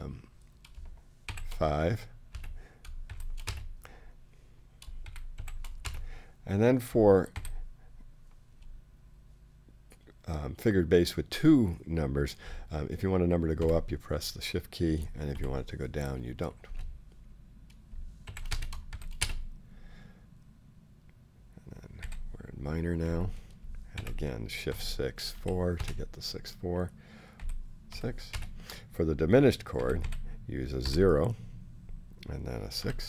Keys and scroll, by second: 1.2 shift+v, 2.3-7.3 typing, 13.6 shift+6, 15.3 shift+4, 16.0 4, 16.6 space, 18.2-20.1 typing, 22.0 i, 23.6-25.8 typing, 27.4 i, 27.9 6, 28.3 space, 29.8 i, 30.8 o, 32.8 6.